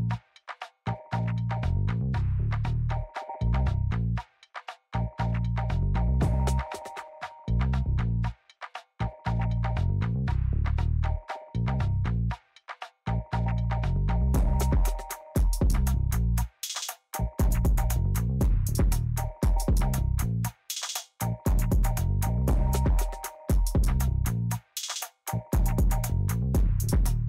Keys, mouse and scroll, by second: 2.0 middle click, 2.5 middle click, 3.2 middle click, 3.4 middle click, 3.6 middle click, 4.3 middle click, 4.7 middle click, 5.2 middle click, 5.5 middle click, 5.8 middle click, 6.3 middle click, 6.6 middle click, 7.1 middle click, 7.4 middle click, 13.2 middle click.